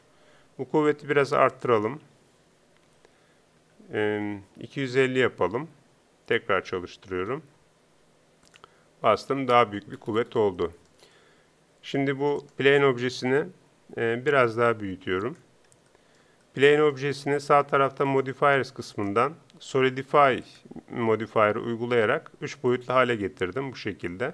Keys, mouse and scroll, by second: 9.7 p, 12.4-14.2 drag, 14.2 s, 16.5-18.9 drag, 20.5-24.3 drag.